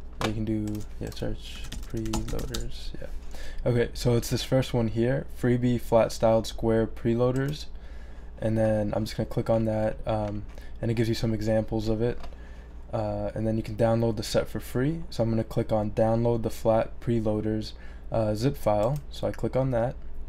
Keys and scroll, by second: 1.3-2.9 typing.